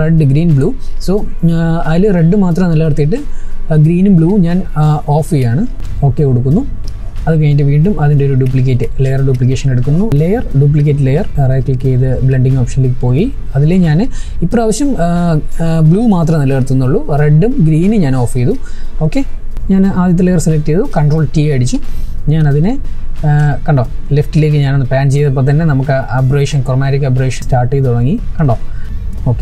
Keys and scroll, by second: 19.5 ctrl+t.